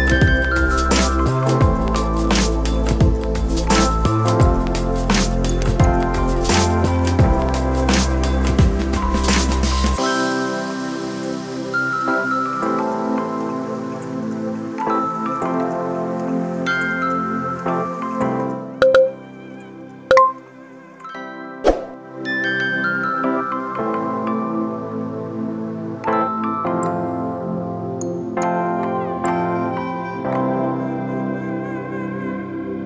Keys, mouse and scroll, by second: 0.1 click, 1.7 middle click, 3.1 shift+click, 4.4 ctrl+b, 7.8 ctrl+r, 9.6 KP_3, 12.4 click, 14.8 shift+d, 17.1 p, 18.6 Tab, 19.5 click, 20.9 click, 21.5 ctrl+middle click, 23.6-24.7 drag, 25.6 ctrl+m, 27.7 KP_1, 28.8 g.